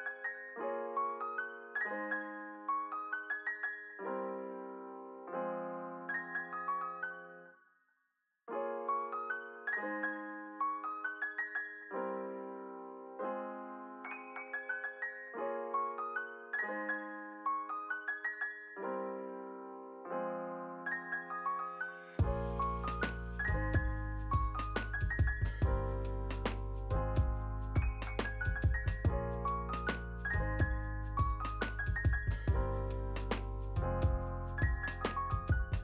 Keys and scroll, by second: 4.2 space, 4.6 ctrl+s, 6.8 ctrl+a, 8.9 u, 12.0-14.2 typing, 14.8 Return, 18.0 ctrl+a, 19.5 ctrl+s, 20.1 space, 25.4 space, 28.0 r, 30.6 r, 35.4-35.8 typing.